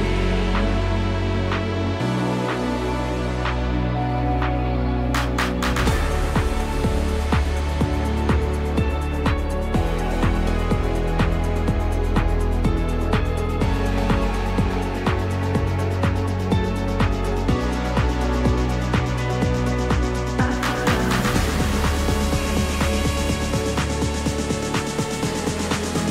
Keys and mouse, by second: 0.2 3, 0.5 click, 1.0 alt+click, 1.8 alt+e, 6.5 3, 8.8 middle click, 9.6 shift+middle click, 10.6 g, 11.1 y, 14.5 click, 15.9 ctrl+KP_Add, 19.1 ctrl+KP_Add, 21.0 click, 23.4 click, 25.6 click.